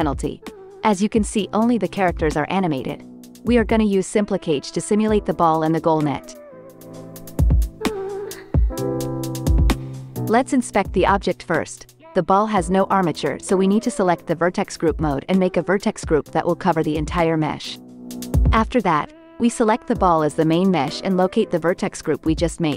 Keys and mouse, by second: 0.6 space, 1.1-4.9 drag, 1.4 space, 3.8 space, 5.8-6.3 drag, 9.8-11.5 drag, 12.2 KP_Decimal, 15.0-20.1 drag, 16.7 Tab, 17.1 a, 22.0 Tab.